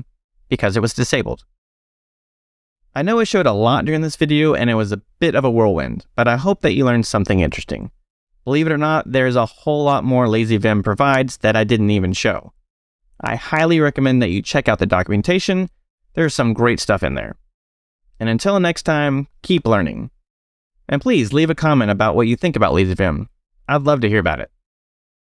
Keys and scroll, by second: 0.7 Escape.